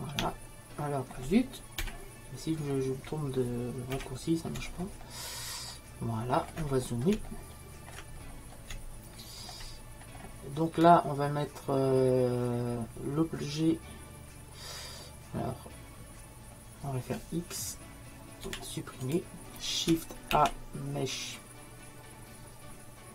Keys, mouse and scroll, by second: 8.5-12.3 middle drag, 18.5 x.